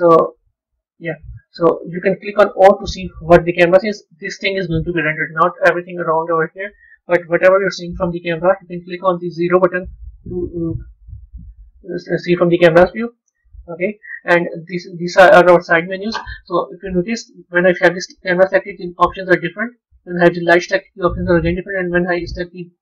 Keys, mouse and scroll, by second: 1.0-2.4 middle drag, 2.4 KP_0, 5.2 middle click, 5.9-7.0 scroll down 9, 7.0 KP_0, 13.6 KP_0, 14.5-16.3 middle drag, 16.3 scroll up 2, 17.1-17.4 scroll up 2, 19.0 click, 20.4 click, 22.6 click.